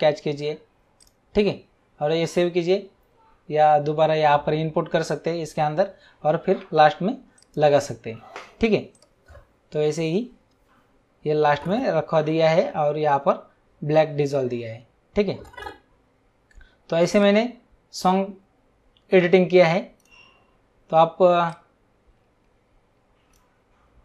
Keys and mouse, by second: 1.0 click, 7.3 click, 8.9 click, 17.2 click, 21.4 click.